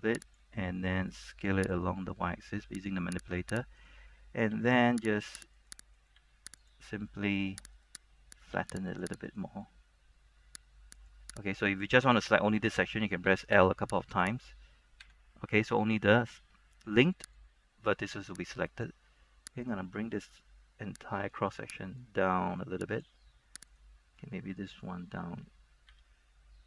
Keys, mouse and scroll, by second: 0.4-3.4 drag, 4.0 right click, 4.6 g, 5.4 click, 5.7 right click, 6.3 g, 6.7 click, 7.9 right click, 8.6 g, 9.1 click, 9.4 right click, 13.4 l, 13.7 l, 14.3 right click, 17.5-23.6 drag, 23.8 right click, 26.1 g.